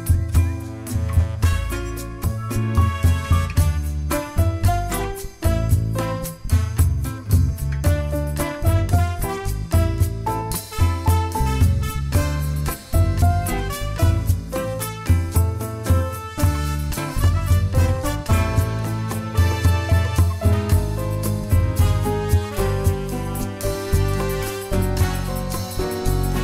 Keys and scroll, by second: 3.9 ctrl+g, 4.9 ctrl+shift+a, 8.2 ctrl+shift+g, 16.1 ctrl+g, 16.8 ctrl+shift+a, 22.5 Delete.